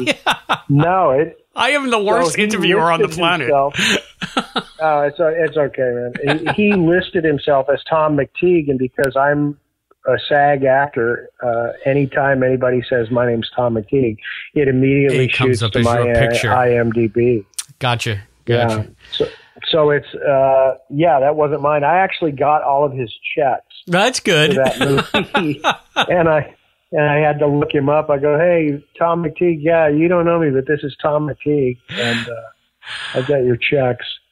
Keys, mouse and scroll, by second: 20.5 click, 21.0 click, 21.9 click, 29.7-31.7 drag, 32.2 click.